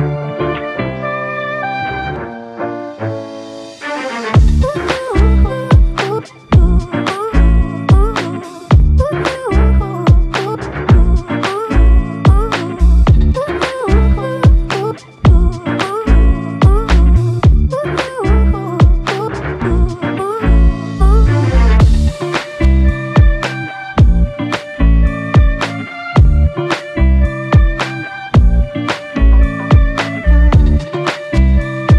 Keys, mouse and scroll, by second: 3.2 alt+shift+click, 7.1 ctrl+click, 8.3 alt+click, 9.6 ctrl+click, 11.6 ctrl+click, 14.8 shift+click, 16.4 shift+click, 17.6 shift+click, 18.7 alt+shift+click, 21.4 shift+click, 24.4 alt+shift+click, 27.7 ctrl+click, 28.5 ctrl+shift+click, 30.0 alt+click.